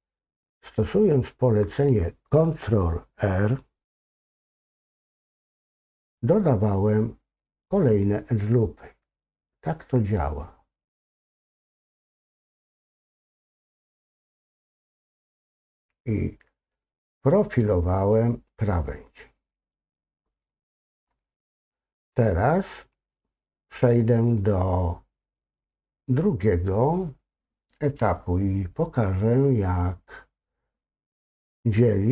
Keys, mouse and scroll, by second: 13.4 ctrl+z, 16.8-18.1 middle drag, 18.9-20.4 middle drag, 20.8-21.2 scroll down 1, 21.2-22.2 middle drag, 22.5-22.8 scroll up 2, 22.8-23.9 middle drag, 24.4-25.7 middle drag.